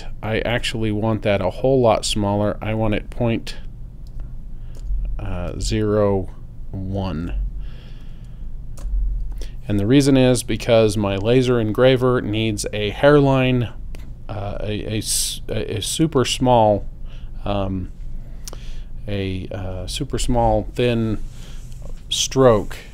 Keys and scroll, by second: 4.1 0, 4.8 ., 5.5 0, 7.2 l, 8.8 Return.